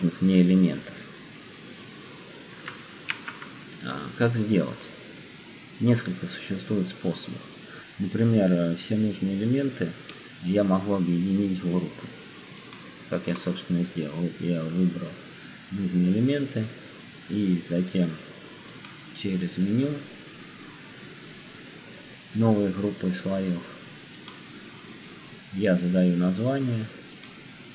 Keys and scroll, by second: 2.9 z.